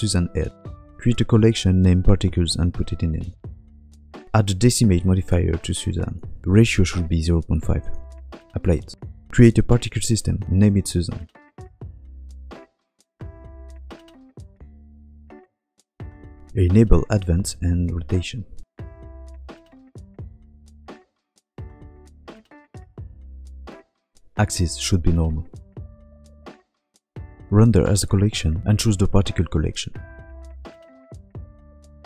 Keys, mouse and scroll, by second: 0.6 shift+middle click, 0.6 g, 1.7 m, 3.6 shift+middle click, 3.6 scroll down 6, 3.6-4.6 typing, 4.6 Tab, 4.7 click, 7.4 Tab, 7.4 click, 8.5-11.4 click, 11.4 n, 12.4 click, 13.8 n, 14.8 click, 17.4 click, 18.0 scroll down 1, 18.3 click, 18.9 scroll down 1, 19.4-19.9 scroll down 2, 20.3 click, 24.3 click, 27.2-27.9 scroll down 5, 27.7 click, 28.0 click, 29.5 click, 30.2 shift+middle click, 30.2 scroll down 2, 30.2 KP_Decimal, 30.3 shift+click, 31.7 scroll down 2.